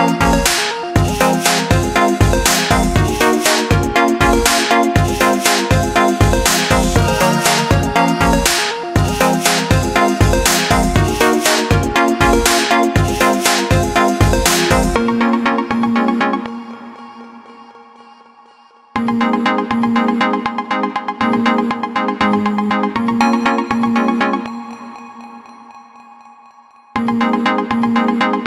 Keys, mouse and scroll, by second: 1.6 KP_1, 3.1-3.8 shift+middle drag, 3.8-4.4 scroll down 2, 4.4-7.5 shift+middle drag, 8.6 click, 10.0 click, 18.9 click, 21.6-24.6 drag, 27.8-28.4 drag.